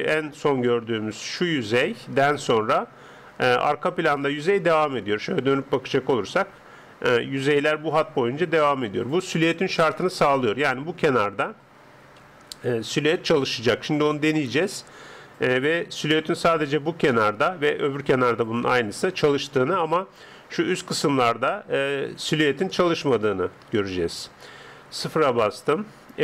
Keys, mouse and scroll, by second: 1.2 click, 4.5-7.6 middle drag, 4.5 d, 7.3 d, 7.6 click, 9.2 d, 9.4 d, 9.8 KP_0, 10.6-12.2 middle drag, 12.2 n, 14.6-16.6 drag, 16.0 n, 17.2-18.8 middle drag, 19.0 middle click, 22.6-24.2 middle drag, 23.6 Tab, 24.5 Tab, 25.0 KP_0.